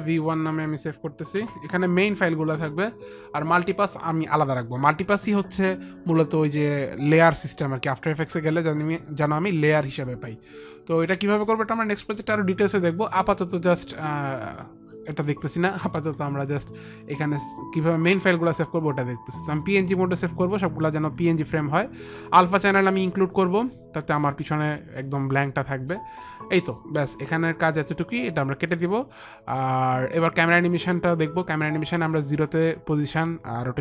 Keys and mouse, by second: 1.7 Return, 1.7 Delete, 1.7 click, 1.9 Return, 1.9 click, 1.9 v, 2.5 Return, 2.5 click, 2.5 KP_1, 2.5 v, 3.0 Return, 6.1 Return, 6.1 KP_1, 6.7 Return, 17.2 click, 20.0 click, 23.1 click, 29.1 click.